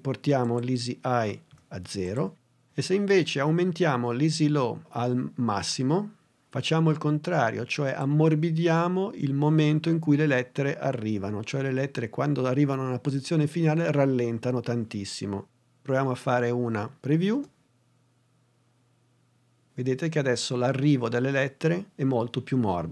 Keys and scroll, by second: 1.5 0, 17.3 space.